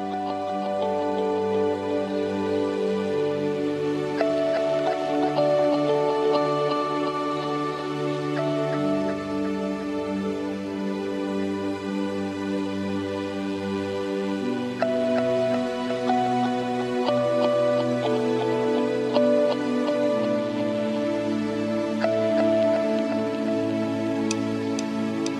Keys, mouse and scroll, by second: 4.5 KP_1, 5.2 KP_3, 6.6 r, 8.2 KP_7, 19.9 KP_0, 21.7 KP_0.